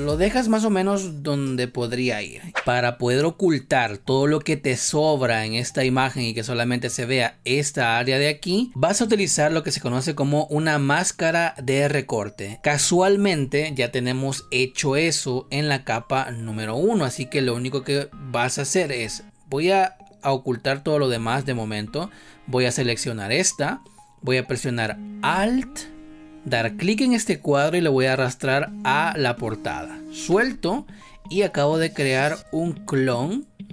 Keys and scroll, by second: 12.5 space.